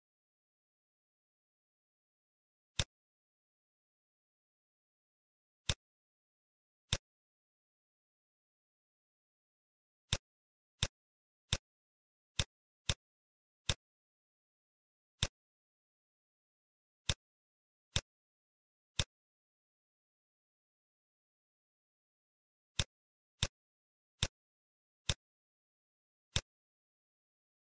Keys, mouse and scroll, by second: 2.6 click, 4.9 middle click, 5.5 click, 5.9 shift+a, 11.4 click, 12.2 click, 13.6 click, 18.2 shift+a, 24.4 click, 25.1 click.